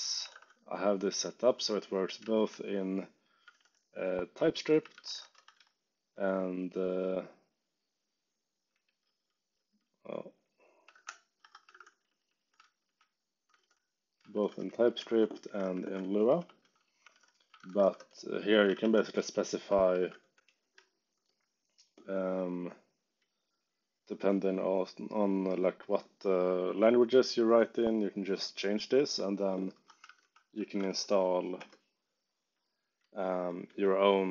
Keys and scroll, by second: 0.0-0.9 typing, 2.3 shift+j, 3.4 space, 3.5 f, 4.6-6.0 typing, 9.0 u, 10.9-21.1 typing, 11.3 Escape, 15.0 ctrl+shift+Tab, 29.7 Escape, 29.7-31.3 typing, 31.5 Return, 32.4 j, 33.6 1.